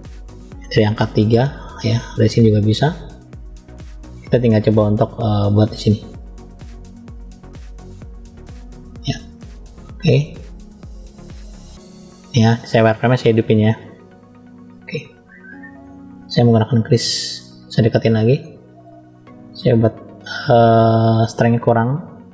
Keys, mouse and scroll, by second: 1.0 KP_3, 1.7 scroll down 1, 2.5-2.9 scroll down 1, 2.9-4.0 scroll up 4, 4.2 shift+middle click, 6.7 click, 12.7-14.6 drag, 16.7 scroll up 1, 17.2 scroll up 1, 17.8 shift+middle click, 18.9 click, 21.1 click.